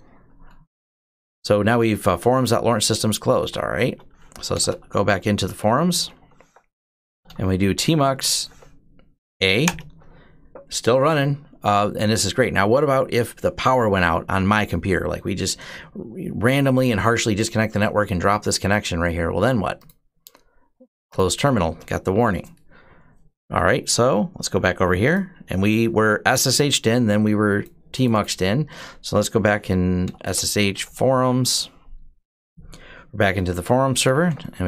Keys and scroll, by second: 2.9-8.7 typing, 9.5 Return, 29.6-31.2 typing, 32.3 Return, 33.5-34.6 typing.